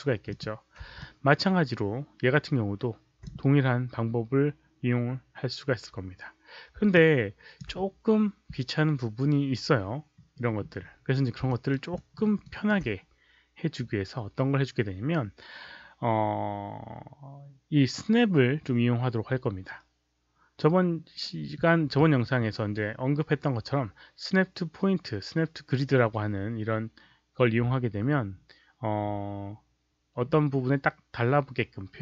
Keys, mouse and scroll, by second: 0.2 click, 0.9-3.2 alt+drag, 6.9-7.5 alt+drag, 11.4 alt+right click, 11.9 alt+middle click, 12.4 alt+right drag.